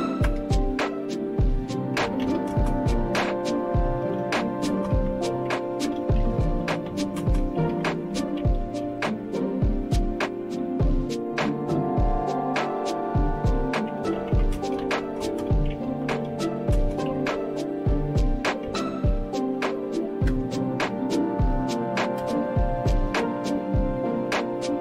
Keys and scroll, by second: 0.2 Return, 1.7-9.9 typing, 13.7-20.8 typing, 21.9-22.7 typing.